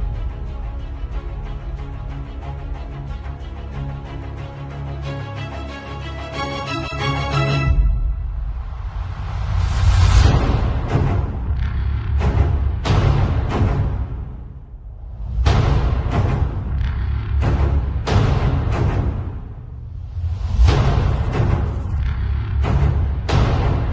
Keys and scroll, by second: 2.0 z, 2.6 space, 3.5 b, 4.2 x, 13.7 z, 14.2 space, 16.1 b, 16.5 [, 18.3 x, 18.8 ], 19.8 x, 20.8 x, 22.5 space, 23.2 z.